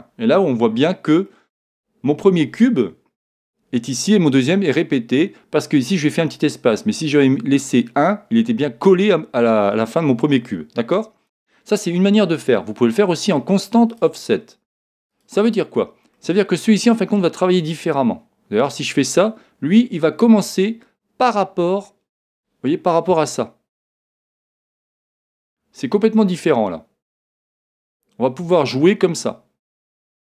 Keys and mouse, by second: 1.3-3.2 middle drag, 13.9-17.0 drag, 16.1-17.9 middle drag, 17.9 click, 21.8-23.7 middle drag, 24.5 click.